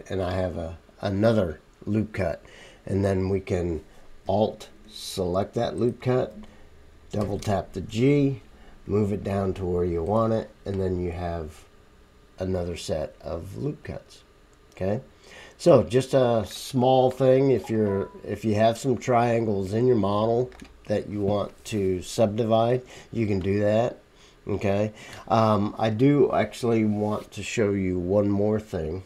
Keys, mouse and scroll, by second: 7.2 g, 12.4-15.2 middle drag, 12.4-23.7 right drag, 15.7-17.8 middle drag, 19.0 middle click, 19.4 middle click, 20.2 middle click, 23.7 click, 24.4-29.0 right drag, 24.4 middle click, 25.0 middle click.